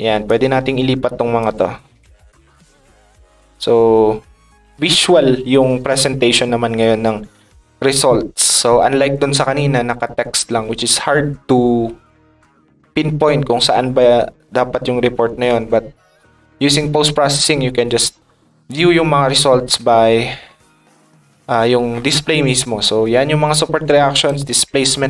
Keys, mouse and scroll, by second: 1.1 click, 2.0 click, 2.9 click, 4.2 click, 20.5 middle click, 21.7 middle click, 22.5 middle click, 23.1 middle click, 24.1 click.